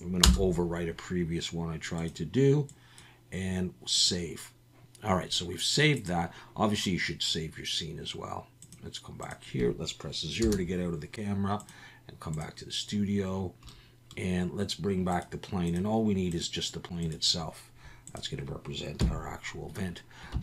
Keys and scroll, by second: 10.4 KP_0, 19.0 KP_1, 20.3 Tab.